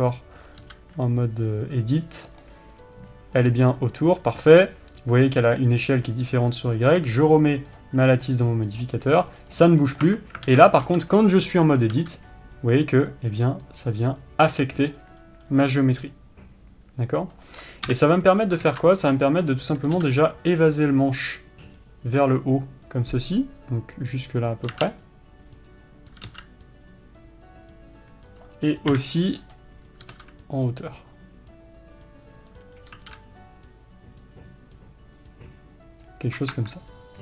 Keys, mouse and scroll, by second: 1.0 click, 1.2 s, 2.9-7.3 middle drag, 4.9-7.0 scroll up 1, 7.3 click, 10.4-18.4 middle drag, 10.6 Tab, 11.6 b, 12.5 s, 18.4 KP_7, 19.0 scroll up 1, 19.2 ctrl+z, 19.8-22.7 shift+middle drag, 20.4 s, 22.7 click, 25.2 s, 29.5 KP_3, 30.0 scroll up 1, 30.6 s, 36.9 scroll down 1, 37.1 Tab.